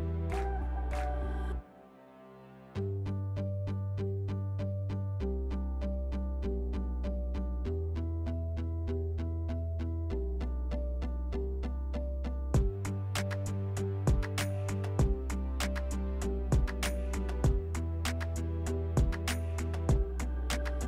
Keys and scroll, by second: 4.7-5.5 typing, 11.0 s, 20.7 s.